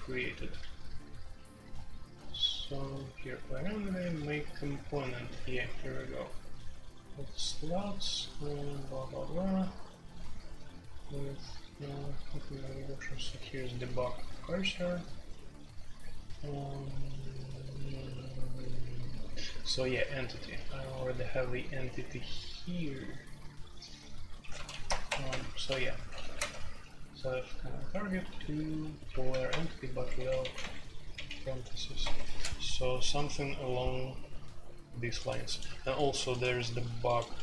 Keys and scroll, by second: 0.0-37.4 typing, 24.8 Return, 26.3 Tab.